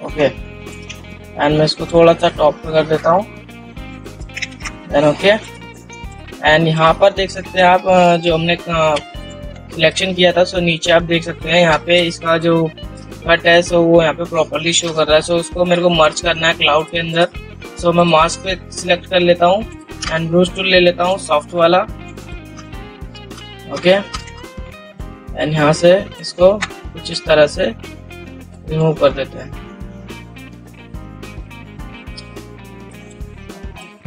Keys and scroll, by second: 7.4 ctrl+z.